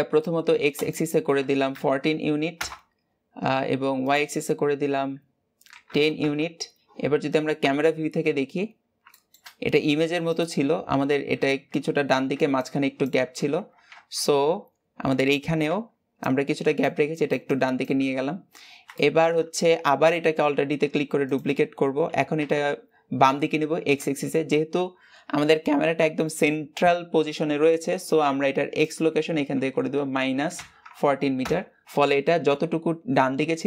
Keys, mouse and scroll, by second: 2.4-7.4 drag, 7.4 KP_0, 8.4-8.9 scroll down 2, 8.9 shift+middle click, 9.3-9.9 scroll up 1, 9.9-10.4 scroll up 1, 13.8-14.3 scroll up 1, 14.3-18.1 scroll up 1, 18.1-18.8 scroll down 2, 18.8-20.4 shift+middle drag, 20.4 alt+d, 22.0 g, 31.3 click.